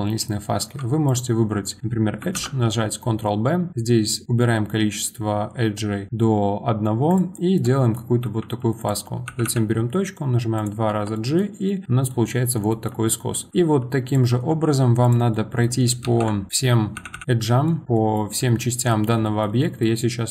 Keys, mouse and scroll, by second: 0.2-0.6 scroll up 1, 0.6 2, 1.1 click, 2.3 ctrl+b, 7.3 middle click, 7.8-8.2 scroll up 1, 8.2 1, 8.8 click, 9.3 g, 10.9 Tab, 11.1 middle click, 11.4 scroll down 2, 11.7-13.1 middle drag, 13.1-13.5 scroll up 1, 13.5 1, 14.0 click, 14.3 Tab, 15.0 click, 15.3 middle click, 16.0 ctrl+shift+b, 16.5 click, 17.0 g, 17.2-17.8 middle drag, 17.8 scroll down 1, 18.0-20.3 middle drag.